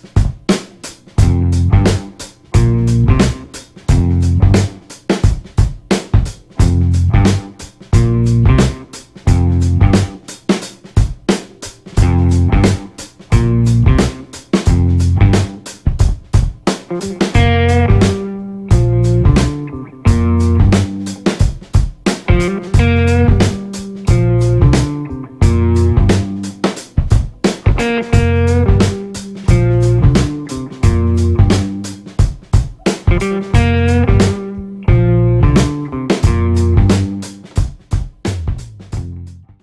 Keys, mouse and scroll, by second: 1.2 a, 1.8 click, 2.5 a, 4.0 BackSpace, 4.4 b, 4.8 click, 6.1 c, 6.5 click, 7.5 d, 8.2 click, 9.6 e, 10.4 click, 11.6 ctrl+scroll up 1, 13.0 click, 15.1-18.6 typing, 19.6-28.7 drag, 38.6 typing.